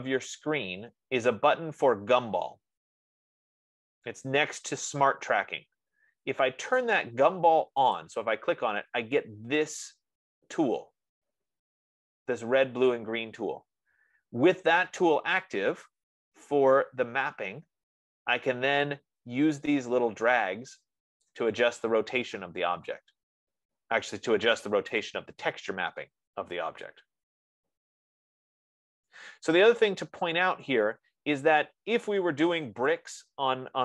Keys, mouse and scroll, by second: 0.6 F15, 8.4-13.4 drag, 21.8-26.5 drag, 30.9-33.8 middle drag.